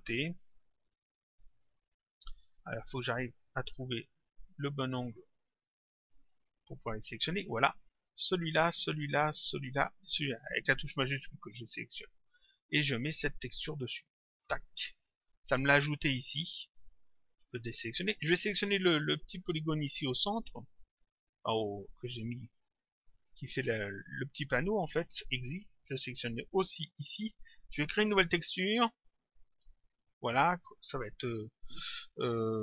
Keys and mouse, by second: 0.5 click, 2.1 click, 3.4 click, 5.7 click, 8.1 click, 12.1 click, 13.6 click, 17.4 click, 19.7 click, 21.2 click, 22.8 click, 28.3 click, 30.8 click.